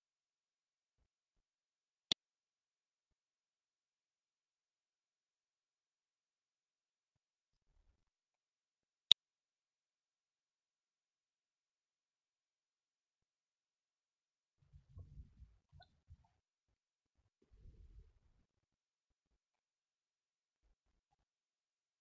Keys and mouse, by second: 1.9 shift+a, 16.0 click, 16.3-19.0 middle drag, 20.9 KP_1.